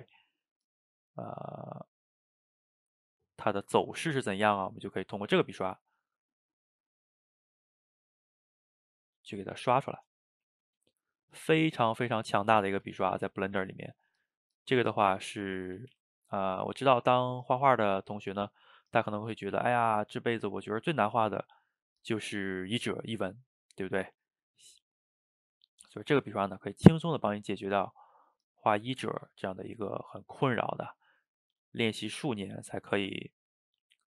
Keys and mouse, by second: 1.5 middle click, 2.3-3.5 drag, 3.5 middle click, 4.3-6.7 drag, 6.7 middle click, 7.3 click, 7.7-9.3 middle drag, 9.3 click, 9.7 middle click, 10.3 f, 10.9 shift+middle click, 11.4-12.6 drag, 12.6 ctrl+z, 12.9 click, 13.7 middle click, 14.3-15.3 drag, 15.3 middle click, 15.8 ctrl+z, 15.9 ctrl+z, 16.1 middle click, 16.6-17.9 drag, 17.9 middle click, 18.5-20.4 drag, 20.4-21.5 middle drag, 21.5-22.9 drag, 22.9-23.9 middle drag, 23.9-25.0 drag, 25.0 middle click, 25.6 click, 25.9-27.3 middle drag, 27.3-31.0 drag, 31.0 middle click, 31.7-33.0 drag, 33.0 ctrl+z, 33.1-34.1 drag.